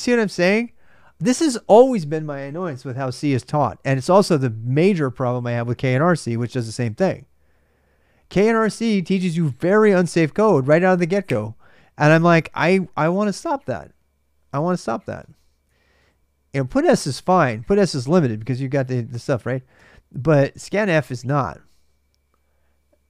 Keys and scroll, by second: 14.2-16.1 typing, 17.7-19.5 typing.